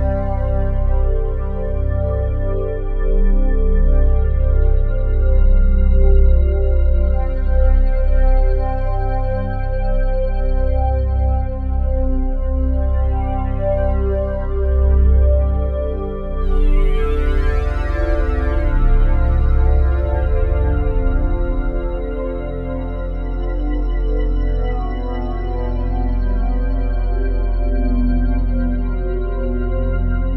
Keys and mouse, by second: 0.7 ctrl+c, 1.3-2.3 drag, 2.4 click, 3.1 click, 3.6 click, 4.2 Delete, 4.5 click, 5.0 ctrl+v, 5.0 typing, 5.6 ctrl+click, 7.3 click, 7.5-11.2 typing, 11.6-13.2 drag, 13.7 click, 14.5 click, 14.6-15.4 typing, 15.4 click, 16.3-17.1 drag, 17.1-17.8 typing, 18.9 click, 19.9-20.7 drag, 21.3-23.2 drag, 23.0 Delete, 23.3 click, 23.8 ctrl+v, 24.6-26.2 drag, 26.4-30.0 drag, 30.0-30.3 typing.